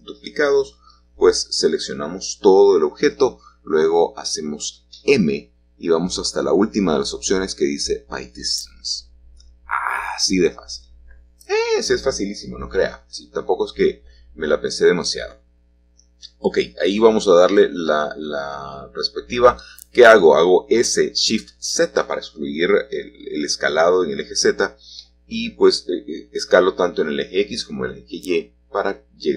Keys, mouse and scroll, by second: 0.1-1.8 shift+scroll up 1, 2.0 g, 6.0-9.2 drag, 9.5-10.6 drag, 10.9 g, 13.6 click, 19.6 click, 21.8 typing, 22.1-23.7 middle drag, 25.3-27.3 shift+drag.